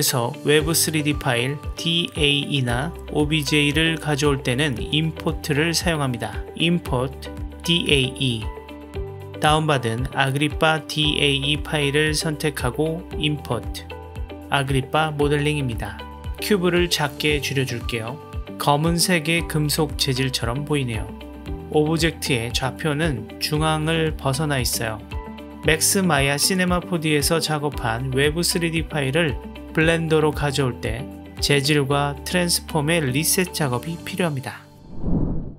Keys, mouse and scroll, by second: 2.0-9.2 drag, 15.2 KP_Decimal, 17.1 s, 19.1-21.2 middle drag, 22.0-24.3 middle drag, 24.8 KP_1, 28.4-29.7 shift+middle drag.